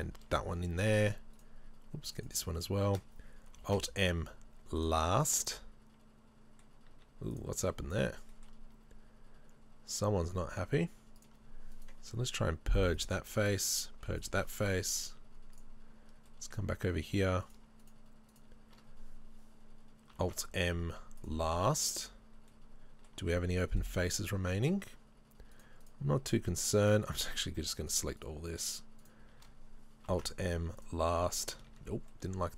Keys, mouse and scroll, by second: 1.4 shift+right click, 2.2-5.4 shift+right drag, 3.7 alt+m, 5.4-11.2 middle drag, 6.9 z, 11.2 click, 11.8 right click, 12.4 Delete, 13.6 right click, 13.9 Delete, 15.6 click, 16.3 middle click, 16.9 middle click, 17.5 right click, 18.3 shift+right click, 20.3 alt+m, 22.5-25.5 middle drag, 25.6 right click, 25.9 shift+right click, 26.3 shift+right click, 27.3 shift+right click, 27.7 shift+right click, 28.0 right click, 29.1-30.2 shift+right drag, 30.2 alt+m, 31.8 ctrl+z, 32.1 middle click.